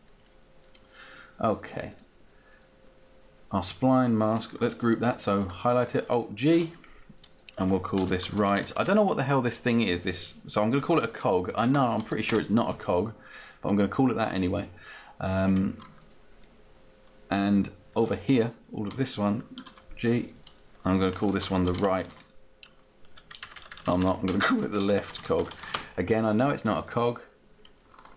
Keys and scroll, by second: 6.5 alt+g, 7.9-9.5 typing, 11.2-12.5 typing, 19.6 alt+g, 21.0-22.4 typing, 24.0-26.0 typing.